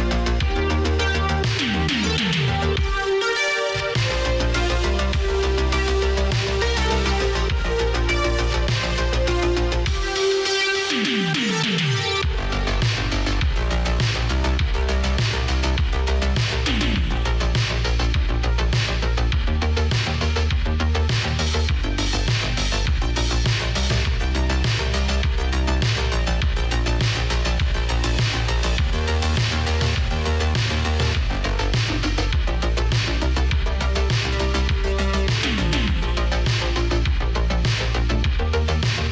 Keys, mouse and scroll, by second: 0.2 space, 1.0 space, 1.7 space, 3.2 space, 13.6 space, 14.2 s, 15.9 s, 17.1 space, 19.3 space, 20.0 space, 22.1 space, 24.4 space, 25.5 space, 26.9 space, 28.1 space, 29.5 space, 30.4 space.